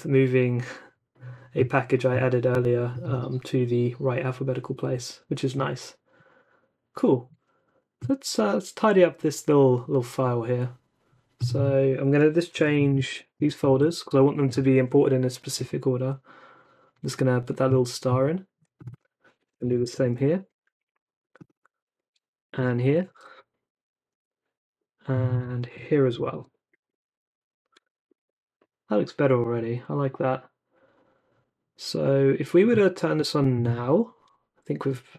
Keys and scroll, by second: 12.5 c, 12.8 shift+8, 13.0 Escape, 13.4 Down, 13.6 shift+v, 13.8 Down, 14.0 d, 19.5 c, 19.8 shift+8, 20.0 Escape, 20.2 Down, 20.4 d, 22.4 shift+8, 22.5 Escape, 22.8 Down, 23.1 shift+v, 23.2 Down, 24.1 d, 25.3-27.7 typing, 26.3 Home, 26.5 Down, 26.9 Down, 27.3 Up, 28.1 super+s.